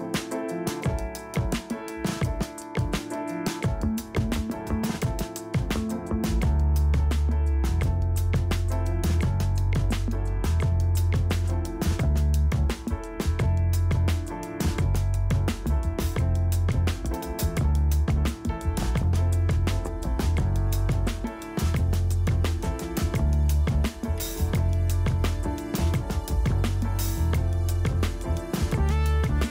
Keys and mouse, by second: 2.4 z, 2.6 KP_3, 3.5 z, 5.1 z, 5.9 middle click, 6.8 z, 9.3-12.2 typing, 13.4-14.6 typing, 15.9 KP_1, 18.5 z, 19.2 z, 19.2 a, 19.5 alt+h, 19.7 a, 20.9 z, 21.8 click, 24.6 click, 25.3 middle click, 25.5 l, 26.2 click, 27.0 a, 29.0-29.5 typing.